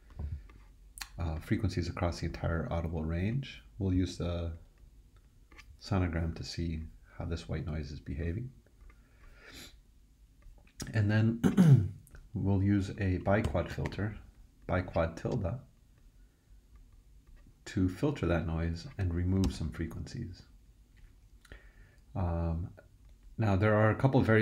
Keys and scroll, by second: 13.2-14.3 typing, 19.4 super+d.